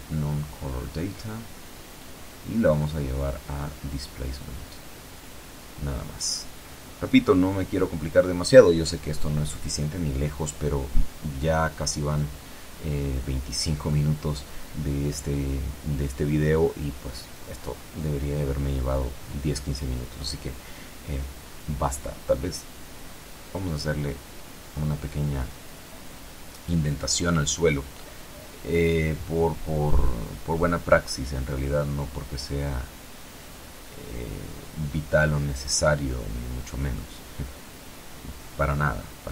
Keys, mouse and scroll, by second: 1.3 click, 2.2 click, 4.2-6.3 drag, 8.6 ctrl+Right, 10.0 F12, 26.3 Escape, 27.9 middle click, 28.0-30.8 drag, 30.9 shift+Tab, 31.9 a, 32.6 alt+shift+right click, 35.9 alt+shift+right click, 37.8-38.8 typing.